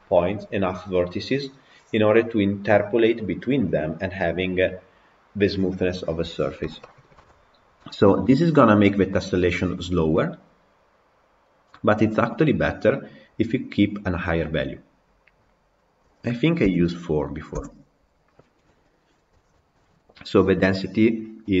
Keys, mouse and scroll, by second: 7.1 KP_Decimal, 8.5-8.8 middle drag, 9.0-12.1 middle drag, 12.1-14.8 drag, 17.7-18.9 drag, 19.9 scroll up 2, 20.1-21.6 middle drag.